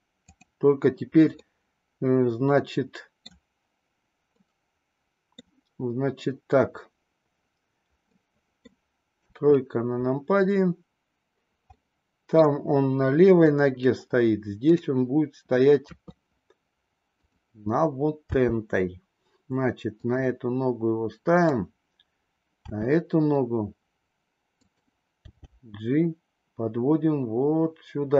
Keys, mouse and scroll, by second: 0.2 click, 1.4-3.2 middle drag, 4.3-5.3 middle drag, 8.0-8.7 middle drag, 9.1 KP_3, 11.7-12.3 middle drag, 14.7 click, 15.9 KP_3, 17.1 click, 18.3 g, 21.2 click, 22.6 r, 25.1 g.